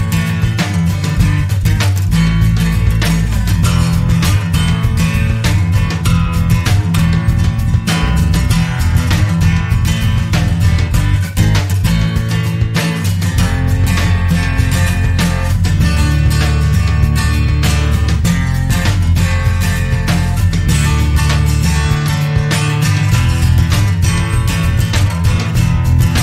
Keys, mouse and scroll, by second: 0.1 click, 0.8-1.3 scroll up 1, 2.1-2.7 scroll down 1, 5.2 click, 9.1 click, 10.2 click, 12.0 click, 14.6 click, 15.7-17.3 typing, 18.2 click, 19.4 0, 20.5 5, 21.5 click, 23.1 click, 24.2 click, 25.9 click.